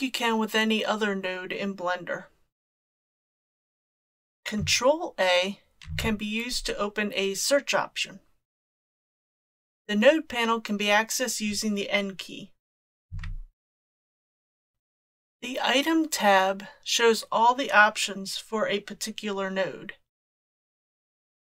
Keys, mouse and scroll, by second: 5.9 ctrl+a, 13.1 n, 13.8 n, 14.7 click.